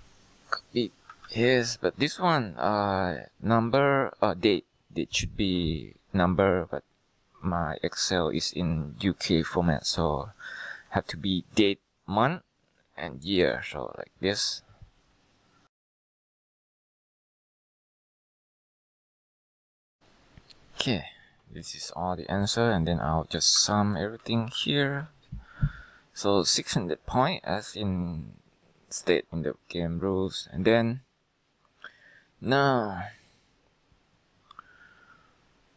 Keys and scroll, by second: 1.4 ctrl+v, 6.7 BackSpace, 8.3 BackSpace, 9.0 BackSpace, 10.1-11.2 Left, 11.8 typing, 13.8 Return, 15.8 ctrl+c, 15.9 ctrl+v, 16.0 ctrl+x, 16.0 ctrl+v, 16.2 F2, 16.2 Left, 16.4 Return, 16.8 ctrl+c, 17.1 ctrl+v, 17.3 ctrl+c, 17.3 ctrl+v, 17.5 ctrl+c, 17.7 F2, 17.8 ctrl+c, 17.8 Return, 17.9 ctrl+v, 18.1 ctrl+c, 18.1 ctrl+v, 18.3 ctrl+c, 18.4 ctrl+v, 18.6 ctrl+c, 18.6 ctrl+v, 18.9 ctrl+c, 19.1 ctrl+c, 19.2 ctrl+v, 19.4 ctrl+c, 19.4 ctrl+v, 19.6 ctrl+c, 19.7 ctrl+v, 19.8 ctrl+c, 19.9 ctrl+v, 23.7 alt+=, 24.5 ctrl+Return.